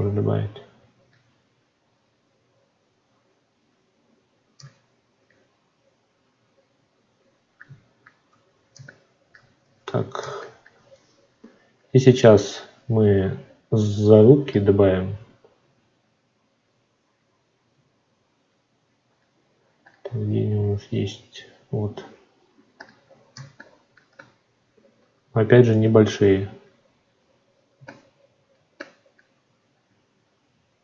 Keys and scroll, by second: 9.5 ctrl+z.